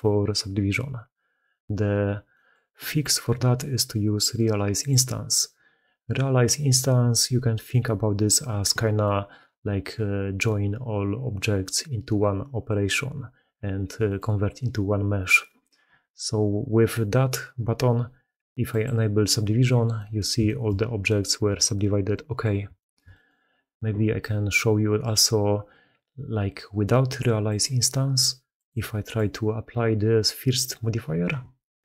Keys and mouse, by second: 2.2 middle click, 4.6-7.7 middle drag, 8.9-9.2 middle drag, 13.9 middle click, 19.8 middle drag, 20.3 shift+middle drag, 20.9 middle click, 22.0 middle drag, 22.6 shift+middle drag, 23.0 middle click, 24.9 middle click, 27.3 middle click, 28.5-31.8 middle drag.